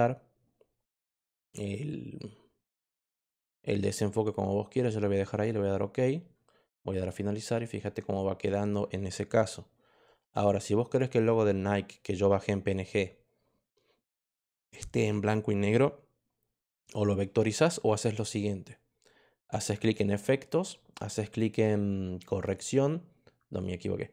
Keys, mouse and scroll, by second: 5.3 click, 6.9 click, 10.8 click, 19.7 click, 22.4 click.